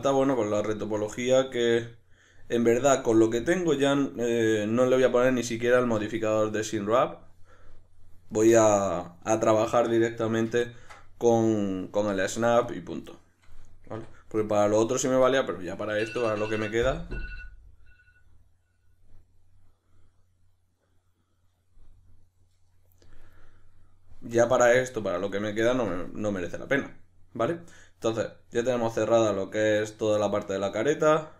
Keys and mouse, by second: 0.0-6.1 shift+middle drag, 6.1-8.3 drag, 8.3-13.9 shift+middle drag, 13.9 1, 14.4 right drag, 16.0-31.3 shift+middle drag.